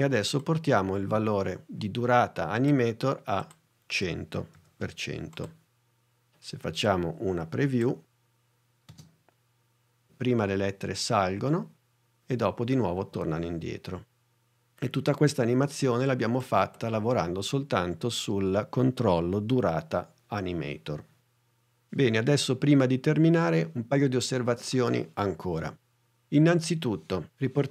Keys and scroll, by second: 4.1 i, 4.6 o, 9.0 space.